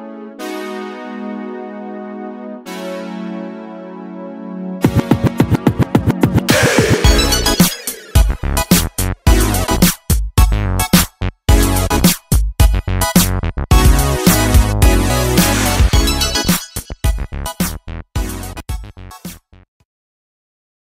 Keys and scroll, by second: 6.6 Escape.